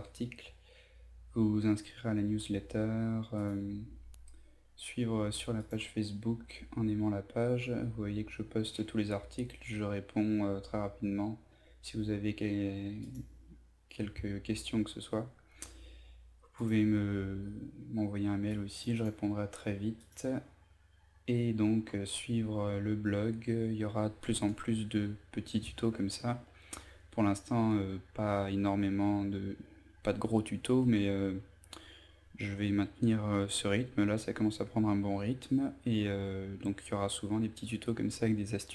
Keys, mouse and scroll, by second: 3.2-4.2 scroll down 1, 5.1 click, 7.3 scroll down 1, 8.2 scroll up 1, 8.6-12.2 scroll down 1, 12.6-13.7 drag, 26.4 scroll down 1, 27.7 scroll up 1.